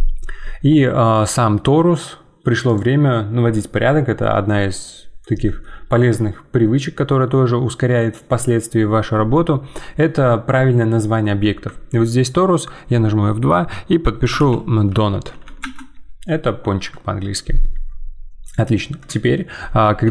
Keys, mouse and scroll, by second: 18.4-20.0 drag, 20.0 g.